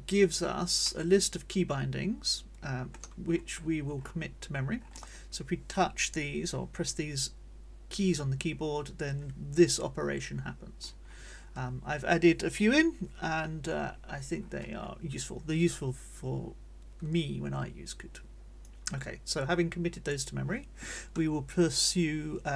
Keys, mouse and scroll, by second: 0.8-3.1 middle drag, 3.1 scroll up 1, 3.3 middle click, 4.0 middle click, 4.8 middle click, 10.8 middle click, 11.3 click, 11.4 middle click, 14.3 middle click, 14.7 click, 18.7-20.3 drag.